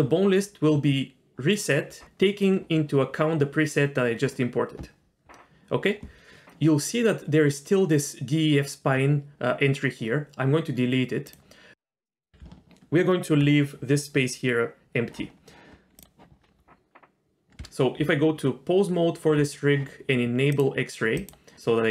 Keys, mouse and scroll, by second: 4.8-6.4 scroll up 2, 11.2 click, 11.9-12.4 middle drag, 12.4 Tab, 15.3-15.6 scroll up 2, 16.0 click, 16.3-17.0 scroll up 2, 17.6 Tab, 18.0 Tab, 20.5 click, 21.2 click.